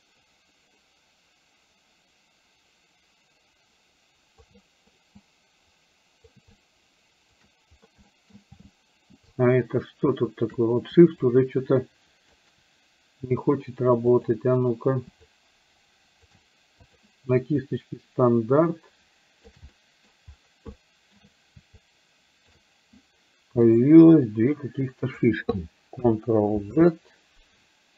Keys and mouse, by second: 4.7 middle click, 5.2-6.3 drag, 6.7 shift+click, 8.1 middle click, 9.4-10.7 shift+drag, 11.3-12.3 shift+drag, 14.2 click, 15.3-16.3 shift+drag, 16.9 click, 17.7-19.4 shift+drag, 19.8 middle click, 20.8 shift+middle click, 21.8 shift+click, 24.3 click, 26.9 ctrl+z.